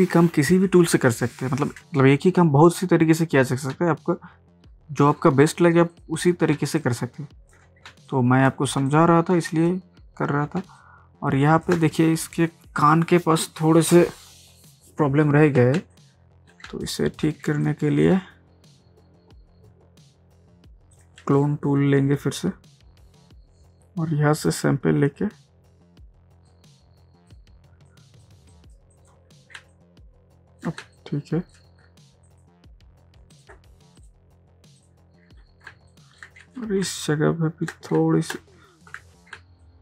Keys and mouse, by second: 4.5 space, 5.9 click, 6.6 ctrl+space, 6.8 ctrl+click, 7.1 ctrl+space, 7.9 space, 8.1 click, 8.4 space, 8.9 ctrl+click, 9.3 ctrl+space, 10.6 ctrl+space, 10.8-11.1 ctrl+drag, 11.1 ctrl+space, 15.6 ctrl+space, 16.0 ctrl+click, 16.3 ctrl+space, 16.9 click, 17.2 space, 17.7 ctrl+click, 18.0 ctrl+space, 20.9 click, 24.4 alt+click, 26.5-28.8 drag, 29.6 ctrl+space, 30.0 ctrl+click, 30.1 ctrl+space, 31.0 click, 31.3 space, 32.3 click, 35.7 ctrl+space, 35.9 ctrl+click, 36.2 ctrl+space, 36.9 ctrl+click, 37.0 ctrl+space, 38.0 ctrl+space, 38.8 ctrl+z, 39.4 ctrl+space, 39.6 ctrl+click.